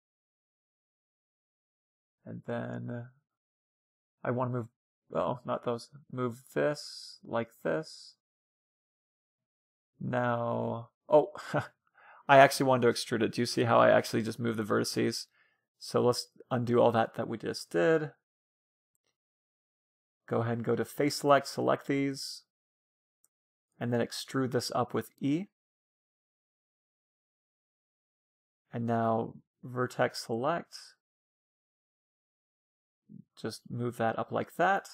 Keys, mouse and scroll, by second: 1.6-3.4 drag, 2.7 ctrl+z, 3.4 c, 4.6 c, 6.4-8.2 drag, 8.8-10.6 drag, 9.4-11.0 middle drag, 10.5 a, 10.6 a, 11.4 a, 14.1 ctrl+z, 20.0-22.4 drag, 21.0 c, 23.1-25.1 right drag, 23.5-25.5 middle drag, 25.8 e, 28.7-33.7 drag, 29.0 a, 29.3 c, 33.7 a, 34.0 c, 34.7 right click.